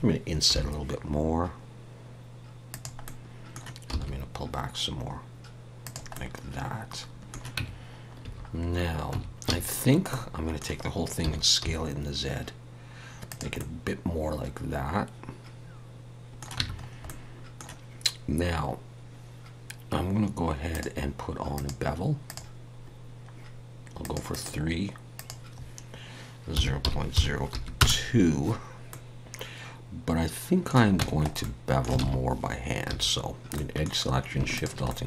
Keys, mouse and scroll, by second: 0.5 i, 3.0 middle click, 3.9 e, 6.1 middle click, 7.6 Tab, 8.2 a, 8.6-9.1 scroll down 1, 9.1 Tab, 9.5 a, 9.8 scroll down 1, 10.1 middle click, 11.2 s, 13.6 middle click, 16.6 Tab, 16.8-19.6 scroll up 2, 17.1 middle click, 20.7 click, 23.2-24.0 scroll up 1, 24.0 click, 28.9 middle click, 31.0 Tab, 31.4 middle click, 32.0 alt+a, 32.9 2, 33.6 middle click, 34.5 alt+shift+click, 34.9 middle click.